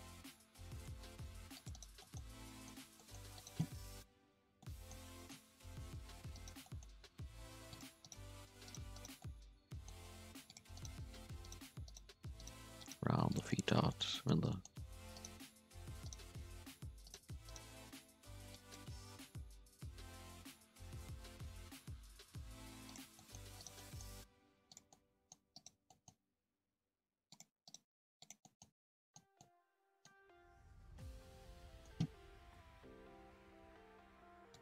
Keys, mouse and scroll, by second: 0.0-0.7 scroll up 2, 0.7 alt+a, 1.2 ctrl+r, 2.0-3.3 middle drag, 3.3 right click, 3.9 KP_1, 4.6 middle click, 5.0 scroll up 2, 5.1 middle click, 5.4 g, 6.6 middle click, 7.1 g, 8.0 right click, 8.4 g, 8.9 2, 8.9 right click, 9.2 middle click, 10.0 g, 10.7 right click, 10.9 g, 11.8 right click, 12.0 g, 12.7 1, 12.8 right click, 13.0 g, 13.5-14.9 middle drag, 14.9 2, 15.1 right click, 15.3 g, 16.2 g, 17.4 right click, 17.8 2, 18.2 1, 18.5 click, 18.9 g, 23.1 middle click, 23.4 1, 23.5 right click, 23.7 middle click, 24.1 g, 24.9 middle click, 25.5 right click, 25.8 middle click, 26.1 g, 27.5 2, 27.6 right click, 27.8 g, 28.4 middle click, 28.8 scroll down 2, 28.9 middle drag, 29.1 Tab, 29.3-30.2 middle drag, 30.2 scroll down 2, 30.3-32.4 middle drag, 32.4 KP_3, 32.5 Tab, 32.9 scroll up 1, 33.0 z, 33.6 alt+a, 33.9-34.5 scroll up 1, 34.5 click.